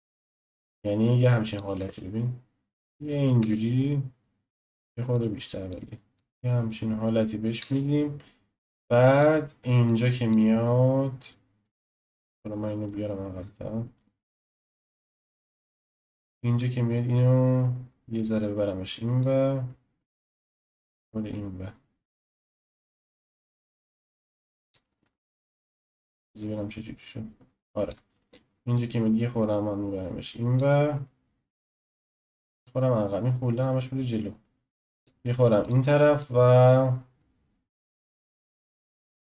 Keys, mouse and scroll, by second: 0.0-1.7 drag, 1.7 space, 3.4 space, 4.5 click, 5.1 click, 6.1 click, 6.3 space, 7.6 space, 9.1 click, 9.9 click, 10.7-11.3 scroll down 1, 11.3-12.0 shift+middle drag, 12.0-12.8 scroll down 1, 12.8-14.0 shift+middle drag, 12.8-13.9 scroll down 2, 13.9-14.8 scroll down 2, 14.8-16.6 shift+middle drag, 16.6 drag, 20.2-23.3 drag, 25.5 click, 25.9-28.8 drag, 32.6-35.7 drag, 36.2-39.3 drag.